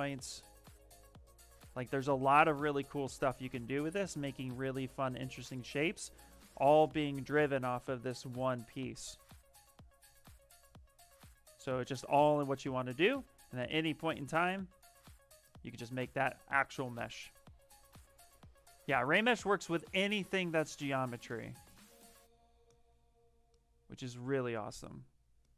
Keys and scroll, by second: 13.3 q.